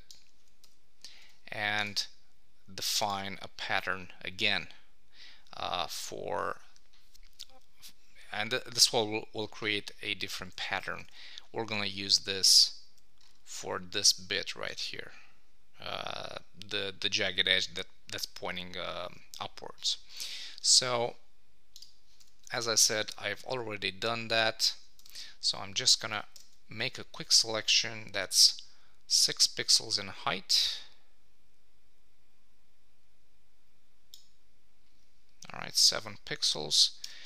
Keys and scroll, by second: 0.6 Return, 10.5 Escape, 11.0 super+Tab, 23.1 Tab, 26.3 super+-, 37.0 shift+super+n.